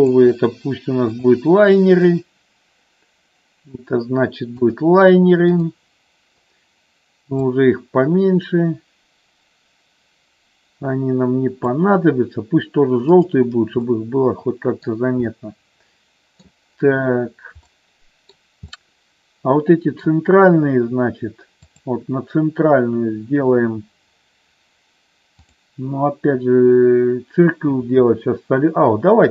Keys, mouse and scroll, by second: 5.7 click, 7.4-12.0 drag, 13.2 click, 13.9 middle click, 15.4-16.5 middle drag, 17.8 middle click, 18.8-20.1 middle drag, 21.5-23.1 drag, 25.4-29.3 drag.